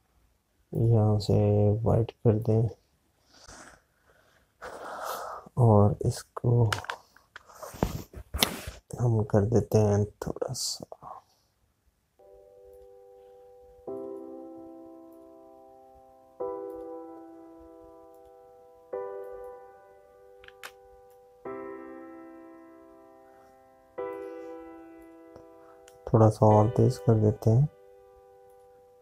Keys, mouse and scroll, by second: 6.5 click, 16.1 click, 21.6 z, 22.4 click.